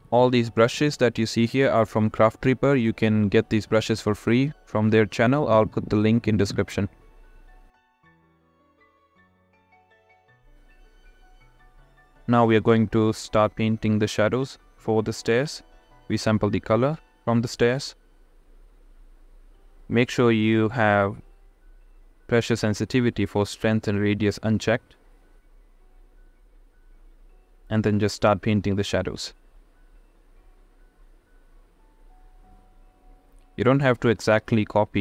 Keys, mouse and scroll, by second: 6.9-7.2 [, 7.2 click, 8.0 ctrl+z, 15.5 click, 16.4 ctrl+z, 16.6 ], 17.0 ], 17.0 ], 17.2 click, 17.2 ], 17.3 click, 17.9 ctrl+z, 18.1 ctrl+z, 19.6 click, 20.7 click, 20.9 click, 21.5 ctrl+z, 21.7 click, 22.0 click, 22.3 click, 23.0 [, 23.1 [, 23.2-24.3 drag, 24.7 click, 25.2 [, 25.4 [, 25.6-27.0 drag, 27.2 click, 28.2 ctrl+z, 28.5 [, 28.6 click, 29.4 click, 29.9 [, 30.3 click, 31.3 ctrl+z, 31.5-33.1 drag.